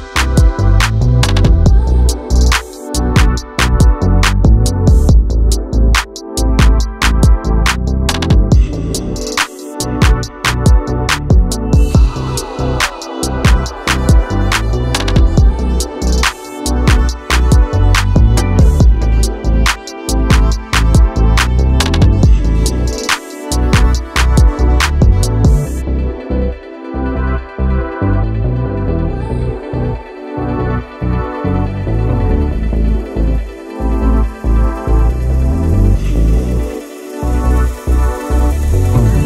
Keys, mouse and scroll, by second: 0.0 Tab, 0.4 r, 2.4-3.1 middle drag, 3.1 Tab, 3.5 3, 3.8 alt+z, 3.9 click, 4.3 shift+click, 4.7 shift+click, 4.9 middle click, 5.3 shift+click, 5.5 shift+click, 5.7 shift+click, 5.9 middle click, 6.2 shift+click, 6.7-7.4 middle drag, 7.4 click, 9.6 middle click, 10.5 Tab, 10.9 Tab, 11.0 3, 11.1 click, 11.5 KP_3, 12.4-13.7 drag, 13.7 alt+z, 14.3 e, 15.3 s, 17.3 Tab, 17.7 alt+z, 18.1 middle drag, 18.3 scroll up 1, 18.6 middle click, 18.8 q, 20.4-21.1 scroll down 1, 21.1 click, 21.5 KP_1, 22.1 shift+a, 23.6-24.2 scroll up 1, 24.2 alt+z, 24.5 s, 26.2 g, 27.3 s, 28.1 r, 29.9 s, 31.9 Tab, 32.1 1, 32.3 click, 32.9 s, 34.5 Tab, 35.2 shift+d, 36.5 s, 38.9 Tab, 39.0 click.